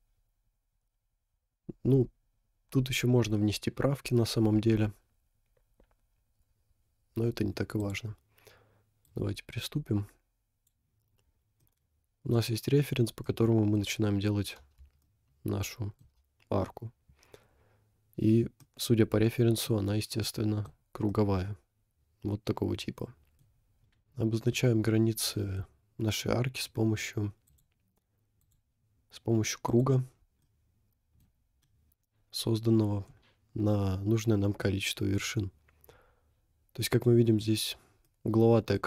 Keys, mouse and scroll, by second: 1.4 scroll up 1, 4.2-5.3 scroll down 7, 6.1 scroll down 1, 8.0 click, 9.1 click, 11.2 scroll down 2, 11.6-12.3 middle drag, 12.9 scroll up 2, 13.2 middle click, 15.0-16.1 shift+middle drag, 18.6-19.2 middle drag, 20.2 middle click, 20.8 scroll down 2, 21.1-23.4 middle drag, 23.6 scroll up 4, 24.5-25.6 middle drag, 26.5-27.3 scroll down 3, 27.5 click, 28.4 click, 29.7 click, 30.4-31.1 middle drag, 31.2 middle click, 31.3 scroll down 3, 31.7 middle drag, 33.1 middle click, 33.4 middle click, 33.6 middle click, 34.5-34.9 scroll up 2, 34.7-36.0 middle drag, 37.0-37.7 middle drag, 37.6-38.2 scroll up 2, 38.2 middle click, 38.8 scroll up 3.